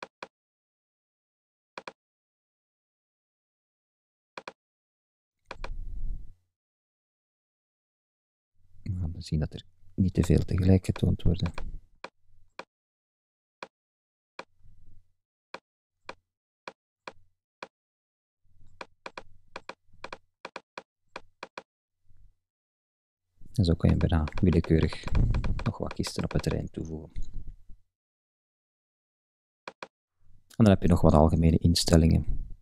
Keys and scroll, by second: 8.8 super+z.